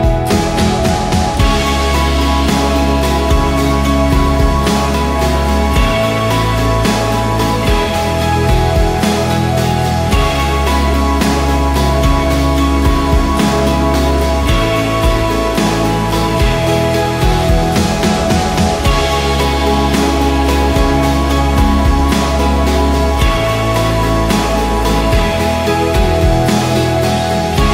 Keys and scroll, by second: 0.0-0.4 typing, 0.6 Return, 3.8 Return, 4.0 Return, 4.4 ctrl+a, 4.6 v, 5.3 ctrl+d, 6.3-7.0 typing, 10.6-11.8 typing, 12.6 ctrl+a, 14.0-17.0 typing, 18.6-19.8 typing, 23.2-23.9 typing, 25.7 v, 26.8 ctrl+d.